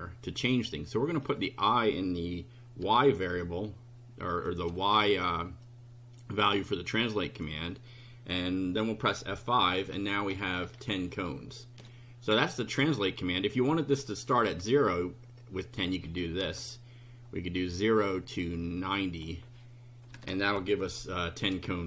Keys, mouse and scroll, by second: 0.9 click, 2.8 i, 5.6 click, 9.0 F5, 9.7-10.9 scroll down 6, 11.3 shift+right click, 15.4 click, 16.4 BackSpace, 18.3-19.4 drag, 20.1 KP_9, 20.1 KP_0, 20.5 F5.